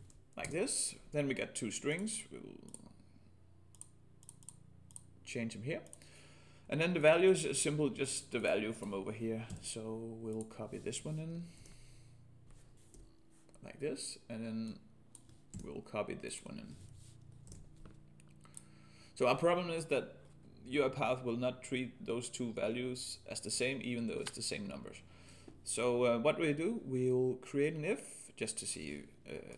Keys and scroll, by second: 9.6 ctrl+c, 11.6 ctrl+v, 15.5 ctrl+c, 17.5 ctrl+v.